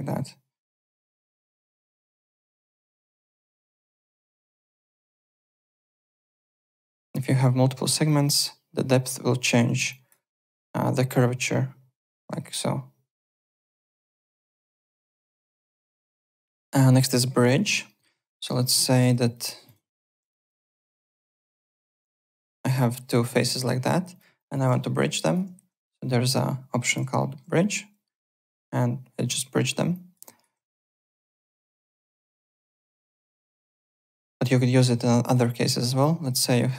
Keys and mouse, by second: 1.6 alt+click, 2.3 click, 3.5 click, 5.4 click, 6.7 click, 8.0 click, 9.9 alt+click, 10.1 alt+right click, 11.0 click, 14.2 alt+click, 14.6 w, 14.8 alt+right click, 15.0 alt+middle click, 15.3 alt+click, 15.8 alt+Tab, 16.2 alt+click, 17.3 click, 17.6 alt+click, 17.8 alt+middle click, 18.1 alt+w, 18.2 3, 18.6 alt+middle click, 18.8 alt+right click, 19.6 click, 20.0 ctrl+d, 20.2 w, 20.5 click, 20.8 alt+middle click, 21.9 ctrl+d, 22.0 w, 22.2 click, 22.7 alt+middle click, 23.2 click, 23.4 alt+right click, 23.5-24.4 typing, 24.1 click, 24.3 alt+click, 25.2 shift+click, 27.1 alt+middle click, 28.2 click, 29.9 alt+click, 30.2 alt+right click, 30.3-31.2 typing, 31.2 alt+right click, 31.4 alt+click, 31.7 alt+middle click, 31.9 alt+right click, 33.1 alt+middle click, 33.5 shift+right click, 35.5 click, 36.4-36.7 typing, 36.4 alt+middle click.